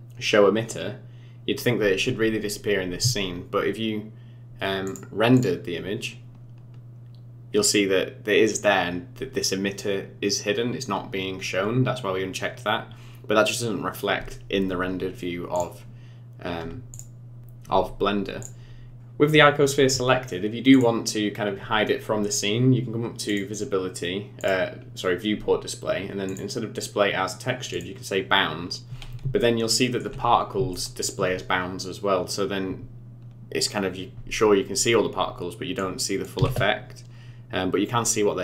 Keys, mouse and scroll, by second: 4.8 click, 16.9 click, 18.4 click, 18.9 click, 20.7 click, 23.3 click, 24.4 click, 24.8-26.1 scroll down 4, 26.3 click, 28.5-29.2 scroll up 6, 29.4 shift+middle click, 30.3 scroll up 3, 30.7 shift+middle click, 35.9 click, 36.4 space.